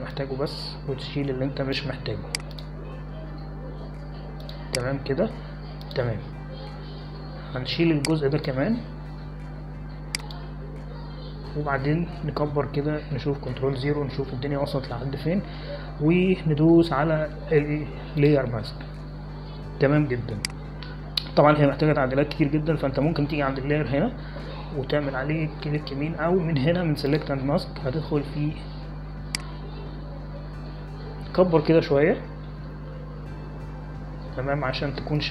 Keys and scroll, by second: 15.4 ctrl+0, 34.2 ctrl+=, 34.4 ctrl+=, 34.6 ctrl+=, 34.8 ctrl+=, 35.0 ctrl+=.